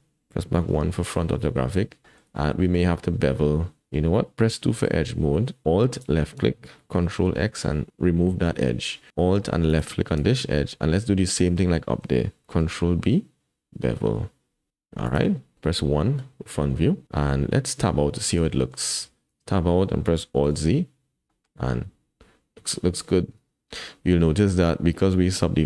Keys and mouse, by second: 0.6 KP_1, 2.0 shift+middle click, 2.4 click, 4.6 2, 5.9 alt+click, 7.4 ctrl+x, 9.7 alt+click, 12.6 ctrl+b, 15.9 KP_1, 18.5 shift+middle click, 19.3 Tab, 20.4 alt+z, 21.3 shift+click.